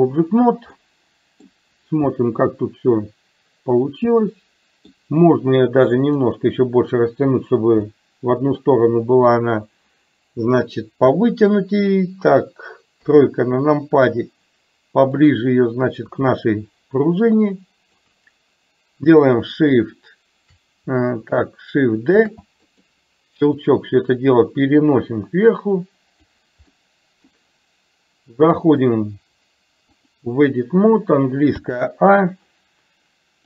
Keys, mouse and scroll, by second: 0.9-1.6 middle drag, 2.2-4.9 middle drag, 6.1-7.3 drag, 7.9-8.7 middle drag, 13.1 KP_3, 15.3-18.1 drag, 22.2 shift+d, 23.7-26.4 drag, 26.8 middle click, 28.7-30.3 drag, 31.7 a.